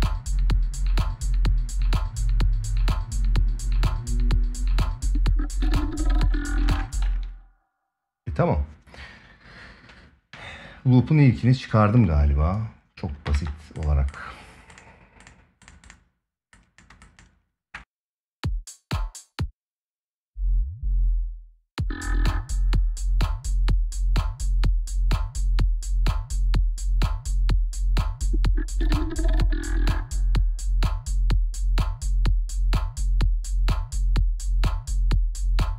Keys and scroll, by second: 6.4 space, 6.8 ctrl+s, 13.0 ctrl+s, 17.8 space, 19.5 space, 21.2 space, 21.4 ctrl+s.